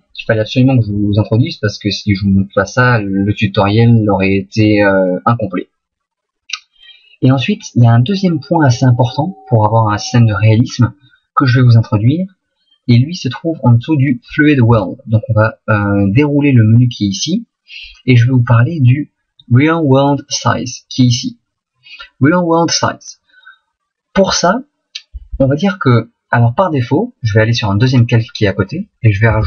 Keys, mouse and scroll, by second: 28.9 click.